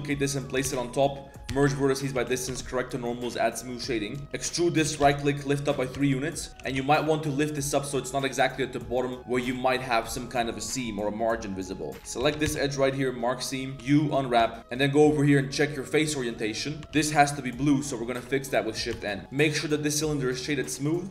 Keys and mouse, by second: 0.0-2.1 typing, 2.5 Tab, 3.2 click, 4.2 Tab, 4.2 z, 4.2 a, 4.3 e, 4.8 g, 5.9 Tab, 6.0 drag, 6.4 click, 6.5 g, 11.4 middle drag, 11.9 z, 12.2 z, 12.4 ctrl+e, 13.7 a, 13.7 u, 14.4 Tab, 14.8-16.0 drag, 16.0 middle drag, 16.3 right click, 16.6 middle click, 16.8 Tab, 16.9 shift+n, 18.5 click, 18.9 Tab, 19.2 click, 19.9-20.5 drag, 21.0 right click.